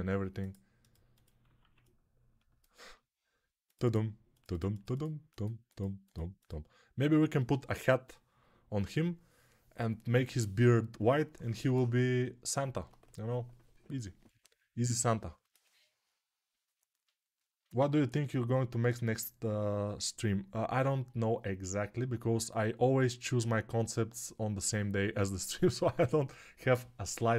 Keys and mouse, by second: 1.6-27.3 ctrl+alt+middle drag.